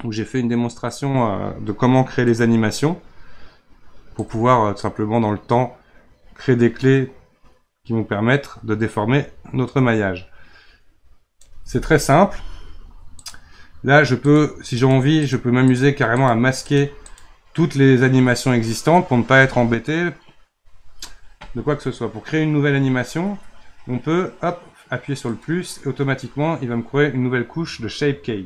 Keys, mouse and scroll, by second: 0.8-3.9 drag, 4.2-7.3 drag, 13.2 click, 14.2 click, 14.8 click, 15.2 click, 15.7 drag, 16.2-16.8 drag, 17.1-17.5 drag, 17.5-18.6 scroll down 1, 18.6 scroll down 1, 25.2-28.3 drag.